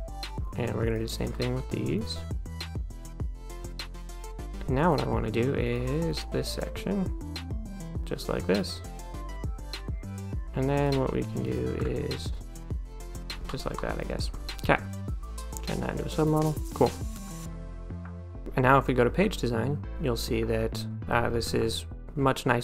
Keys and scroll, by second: 13.8 1, 14.2 d.